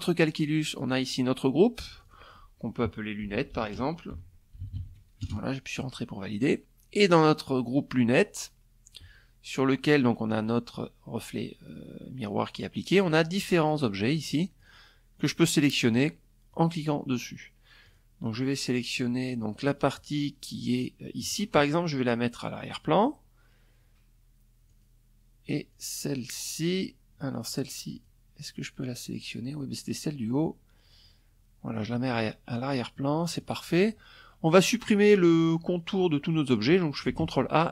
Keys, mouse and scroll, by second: 0.4 click, 1.5-3.8 typing, 8.9 click, 11.5 click, 12.1 click, 12.7 click, 13.1 click, 13.7 click, 14.4 click, 15.0 click, 16.4 click, 18.0 click, 21.3 click, 23.2 click, 24.2 click, 24.9 click, 26.5 click, 30.6 click, 31.5 middle click, 35.0 click, 35.7 ctrl+a.